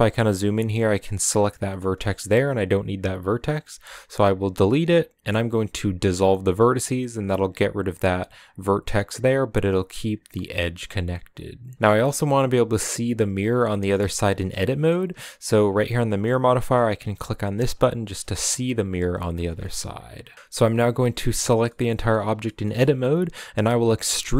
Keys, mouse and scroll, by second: 0.6 right click, 0.9-2.1 middle drag, 2.1 scroll up 2, 6.3 x, 6.8 scroll down 2, 7.2 right click, 8.0 right click, 9.6 right click, 11.3 shift+right click, 11.6 scroll down 1, 11.7-14.4 shift+middle drag, 14.4 scroll up 1, 14.4-17.5 middle drag, 17.5 click, 17.9 shift+middle click, 18.3 a, 18.8 a, 19.2 a, 19.4-20.8 middle drag, 20.8 a, 21.2 scroll down 2, 21.4-22.8 middle drag, 22.8-24.0 scroll up 1, 24.0 e.